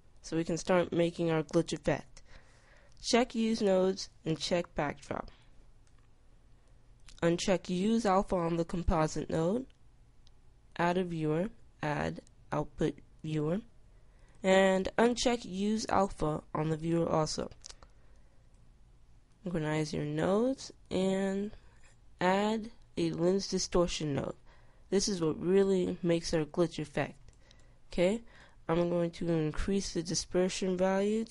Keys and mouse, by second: 2.5-13.0 drag, 13.0-16.4 middle drag, 16.4-25.4 drag, 27.5-31.3 middle drag.